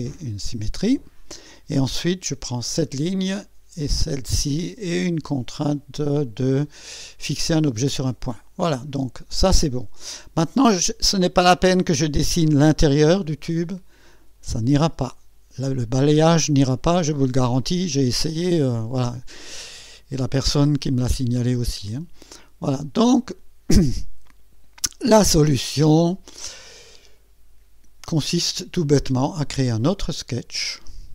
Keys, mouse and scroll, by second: 2.3 click, 4.1 click, 7.6 click, 22.1 click, 25.3 scroll up 1, 26.0-27.2 right drag, 30.0 click.